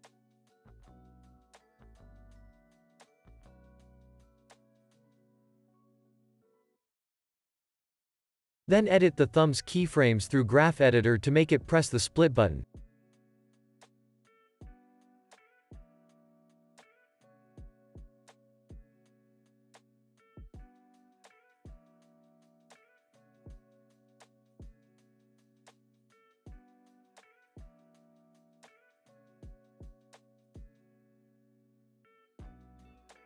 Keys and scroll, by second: 1.9 super+c, 2.9 super+v, 3.2 super+s, 4.0 space, 5.4 space, 5.6 super+s, 6.5 space, 16.5 u, 33.0 alt+x.